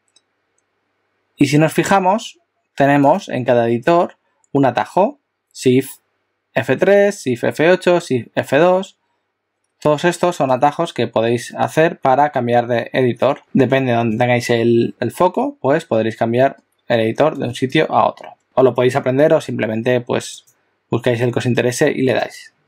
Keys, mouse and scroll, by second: 11.6 shift+F2, 11.6 shift+F3, 13.4 shift+F2, 13.4 shift+F3, 13.4 shift+F4, 13.4 shift+F5, 16.4 shift+F4, 16.9 shift+F5, 17.5 shift+F6, 18.1 shift+F3, 18.4 shift+F2, 18.4 shift+F5, 22.2 click.